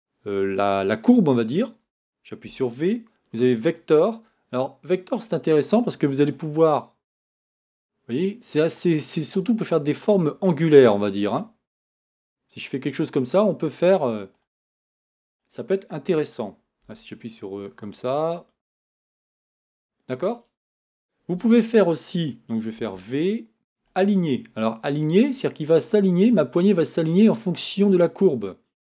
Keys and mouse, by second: 2.4 v, 6.3-9.0 right drag, 11.9-13.2 right drag, 16.8 g, 22.8 v.